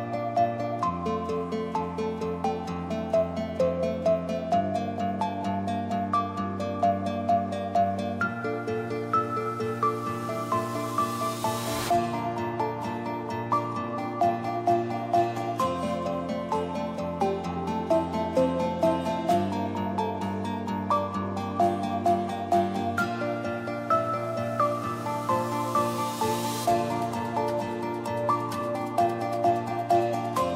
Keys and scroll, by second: 13.8 Return.